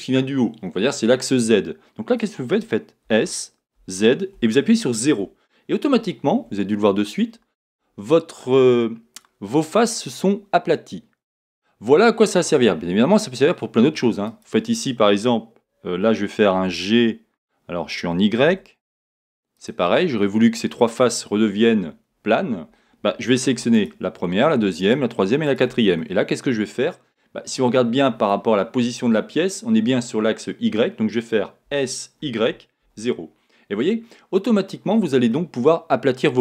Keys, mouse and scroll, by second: 3.1 s, 6.0 Return, 6.0-13.4 middle drag, 14.3 click, 16.5 g, 19.6 click, 20.0-23.7 middle drag, 23.7 shift+click, 24.8 shift+click, 25.5 shift+click, 26.0 middle click, 31.7 s, 33.8 Return, 35.3 middle click, 36.2-36.4 middle drag.